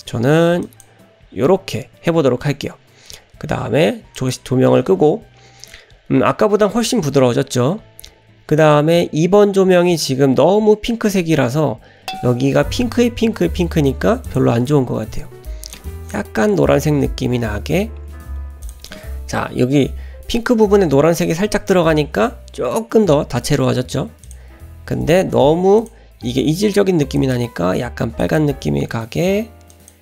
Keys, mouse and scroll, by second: 4.1 click, 8.6 click, 24.2 click, 25.8 click.